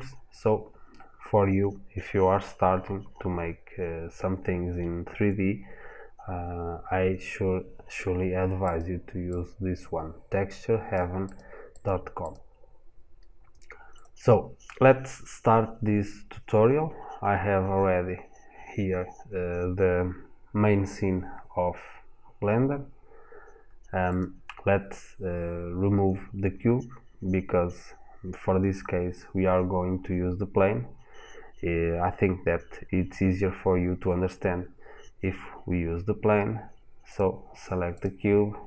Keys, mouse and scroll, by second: 23.9 click, 36.9 click, 37.7 click.